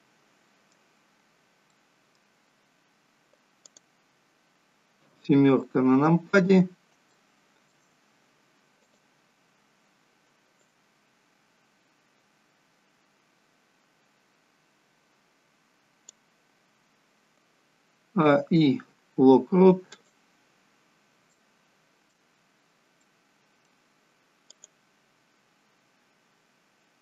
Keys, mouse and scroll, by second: 0.0 middle click, 1.7 middle click, 2.5-3.7 scroll up 3, 3.7 click, 3.7-4.8 scroll up 3, 5.1 KP_7, 6.0-6.6 scroll down 1, 6.6 scroll down 4, 7.1 shift+middle click, 8.8 click, 10.5 click, 18.0 a, 18.2 i, 21.4 middle click, 22.5-23.2 scroll up 6, 23.0 middle click, 24.5 click.